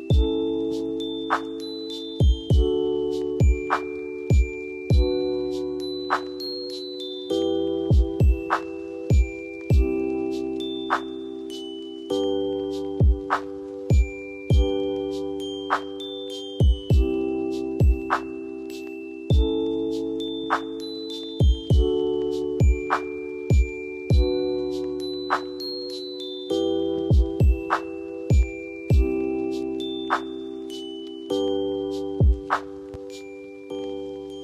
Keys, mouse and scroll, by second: 6.2 F4, 7.9 click, 8.6 F2, 9.2-21.9 drag, 22.2 shift+click, 23.6 Down, 25.4 ctrl+g, 26.3 F2, 26.5 click, 28.1 scroll down 1, 29.3 shift+click, 30.3 e, 30.9-34.4 drag.